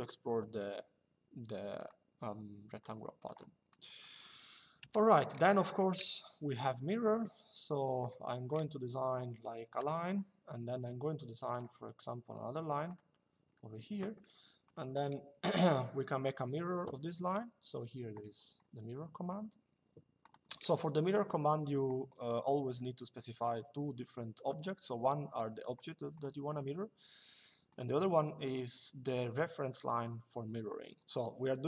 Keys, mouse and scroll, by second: 1.5 click, 2.9 click, 4.5 Delete, 5.0 middle click, 5.7 l, 7.7 click, 8.6 Escape, 9.5 l, 11.2 click, 12.6 click, 13.0 Escape, 14.3 click, 19.9 click, 25.9 click, 27.4 click.